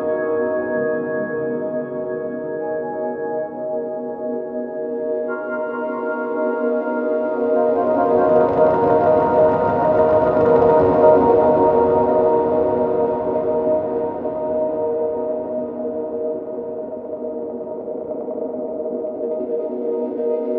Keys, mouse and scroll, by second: 2.9-5.3 drag, 2.9-15.1 middle drag, 6.1-6.6 drag, 6.1-6.6 right drag, 6.7-10.5 drag, 6.7-10.5 right drag, 10.0 alt+v, 11.7-15.1 drag, 11.7-20.5 right drag, 13.0 Tab, 14.4 ctrl+r, 15.3 ctrl+r, 15.8 click, 15.8 middle click, 16.2 ctrl+r, 19.8 ctrl+r.